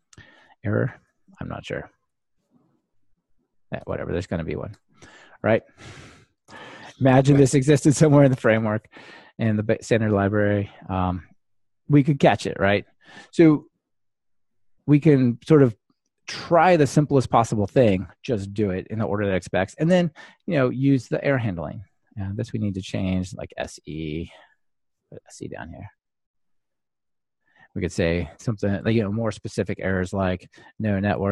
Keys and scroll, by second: 7.0 super+x, 8.6 super+v, 24.8 Escape, 28.9 ctrl+alt+shift+Left.